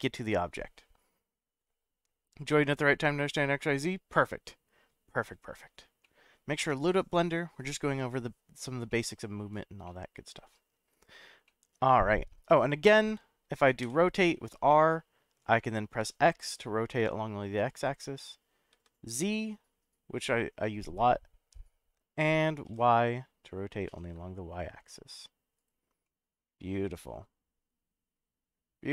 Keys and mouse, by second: 6.0-6.8 middle drag, 8.9-9.5 middle drag, 9.8-10.9 middle drag, 11.4-12.3 middle drag, 12.6 click, 13.0-13.4 middle drag, 13.8 r, 16.0 x, 18.7 z, 22.7 y, 25.6 right click, 26.0-28.9 middle drag.